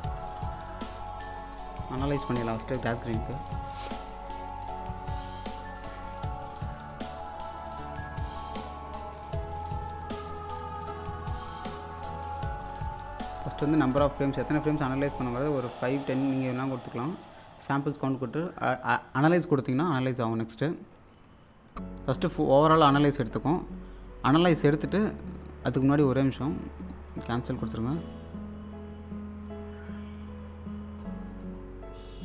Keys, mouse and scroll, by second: 0.7 alt+scroll down 1, 1.7 click, 3.6 alt+Num_Lock, 3.6 click, 6.4-6.9 typing, 8.5 scroll up 1, 8.7 click, 13.9-19.8 drag, 23.8 click, 24.5 scroll down 1, 27.1 click.